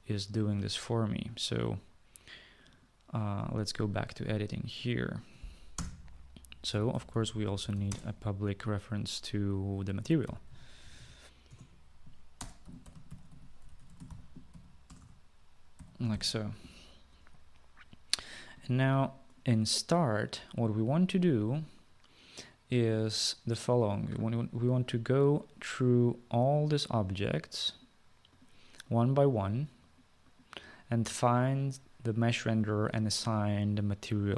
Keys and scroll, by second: 0.6 ctrl+s, 5.8 Return, 6.5-8.3 typing, 10.1-16.3 typing, 11.6 Return.